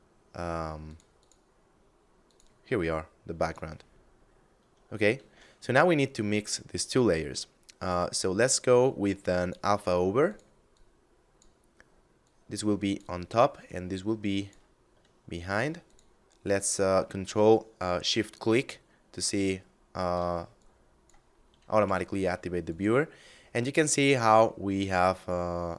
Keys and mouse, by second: 0.3 click, 3.3 middle click, 4.7 shift+a, 8.8 click, 15.3 ctrl+shift+click, 20.1 click, 20.8 middle click, 21.3 g, 22.1 click, 22.6 middle click.